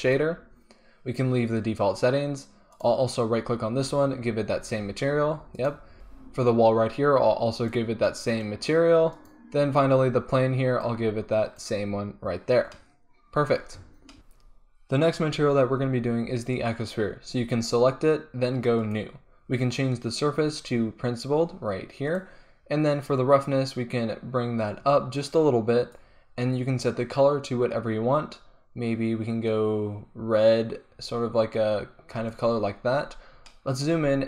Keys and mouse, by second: 5.9-9.2 drag, 11.1 click, 18.9-33.6 drag, 33.6 middle drag.